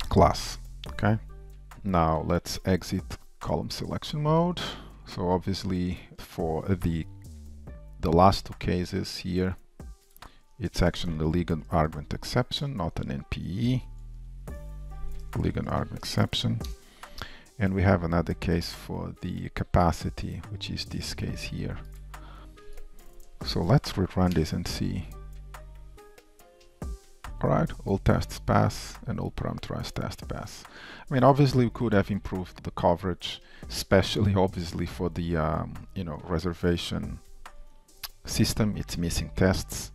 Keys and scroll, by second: 1.7 Return, 6.1 shift+super+a, 7.3 alt+shift+Insert, 7.3 shift+super+8, 14.9 ctrl+w, 14.9 alt+Up, 17.1 Return, 21.2 Return, 26.5 Return, 27.3 super+s, 35.4 shift+super+F12.